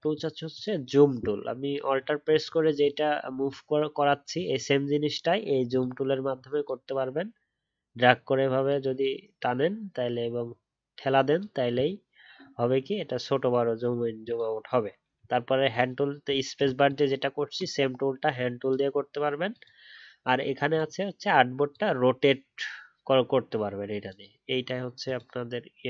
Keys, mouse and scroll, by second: 1.9 alt+scroll down 1, 2.2 alt+scroll up 1, 2.4 alt+scroll down 1, 2.5 alt+scroll up 1, 2.7-3.2 alt+scroll down 1, 3.2 alt+scroll up 1, 3.4-3.9 alt+scroll down 1, 3.9 alt+scroll down 1, 4.0 alt+scroll up 1, 4.3-5.2 alt+scroll down 1.